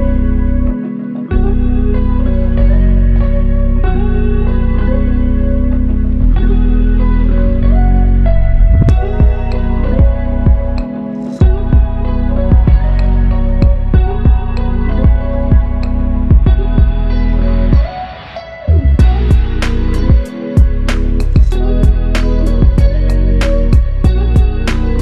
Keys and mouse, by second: 0.9 ctrl+i, 2.2 alt+click, 16.7 f, 17.9 alt+click, 22.9 alt+click, 24.6 alt+m.